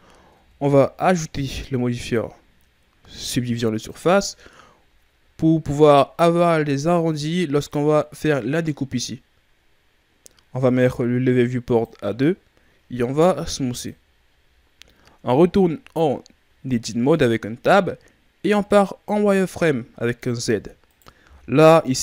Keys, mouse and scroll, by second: 0.3 Tab, 1.9 click, 4.9 ctrl+scroll down 2, 11.6 click, 13.1 w, 15.1 Tab, 16.7-18.5 shift+scroll up 4, 18.5 right click, 19.0 z, 20.8 right click, 21.2 b.